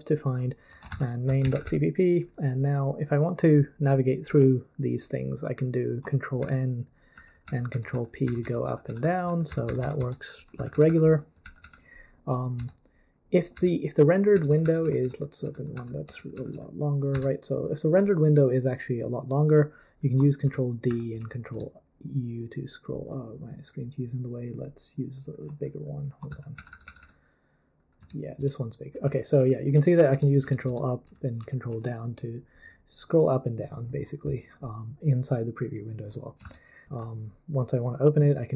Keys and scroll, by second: 0.0-2.1 typing, 6.4 ctrl+n, 7.1 ctrl+p, 7.4 ctrl+p, 7.7 ctrl+p, 7.9 ctrl+p, 8.2 ctrl+n, 8.4 ctrl+n, 8.7 ctrl+p, 9.0 ctrl+p, 9.3 ctrl+p, 9.5 ctrl+n, 9.7 ctrl+n, 9.8 ctrl+n, 10.0 ctrl+n, 10.6 ctrl+p, 10.7 ctrl+p, 10.9 ctrl+p, 11.4 ctrl+p, 11.6 ctrl+p, 12.6 ctrl+n, 13.5 ctrl+n, 14.3 ctrl+p, 14.6 ctrl+p, 14.8 ctrl+p, 15.2 ctrl+p, 15.4 ctrl+p, 15.7 ctrl+p, 16.1 ctrl+p, 16.3 ctrl+p, 16.5 ctrl+p, 17.1 ctrl+b, 17.3 ctrl+n, 20.4 ctrl+d, 20.9 ctrl+u, 21.2 ctrl+u, 21.5 ctrl+d, 26.3 ctrl+p, 26.6 ctrl+p, 26.7 ctrl+p, 26.8 ctrl+p, 27.0 ctrl+p, 28.0 ctrl+d, 28.4 ctrl+d, 29.0 ctrl+u, 29.4 ctrl+u, 29.7 ctrl+u, 30.1 ctrl+d, 30.4 ctrl+d, 30.7 ctrl+d, 31.0 ctrl+u, 31.4 ctrl+u, 31.7 ctrl+u, 36.4 super+l, 36.8 super+l.